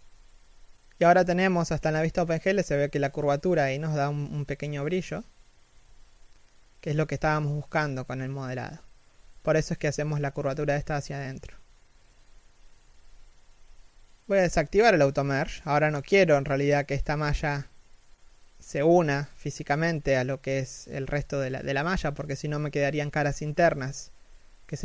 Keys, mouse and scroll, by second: 4.2-7.7 typing, 4.5 middle click, 17.8 g, 20.6 z, 20.8 middle click, 23.8 KP_3, 24.1 z.